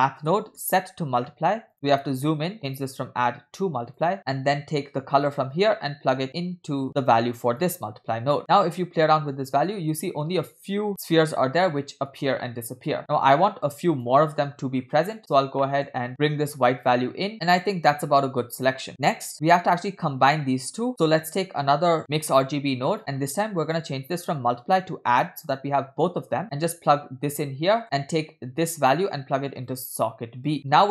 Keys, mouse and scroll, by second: 1.9 middle click, 1.9 click, 1.9-2.5 scroll up 6, 2.6-4.2 drag, 4.2 scroll down 6, 4.2 middle click, 5.3-7.9 drag, 8.4 middle click, 8.4-8.9 scroll up 8, 9.1-10.9 shift+drag, 12.1-14.1 shift+drag, 14.5-15.1 scroll down 4, 15.2 middle click, 15.7 middle click, 16.2 scroll up 3, 16.7-17.8 drag, 18.9 middle click, 18.9 scroll down 4, 19.3 middle click, 19.7-20.2 scroll up 1, 21.0 click, 21.0-21.5 scroll up 4, 21.0 middle click, 22.4 shift+d, 23.0 middle click, 23.2-23.7 scroll up 2, 23.7-25.8 drag, 26.3 scroll down 1, 26.4-27.5 drag, 27.9 middle click, 27.9 scroll down 2, 28.7-29.9 drag, 30.7-30.9 scroll up 6, 30.8 middle click.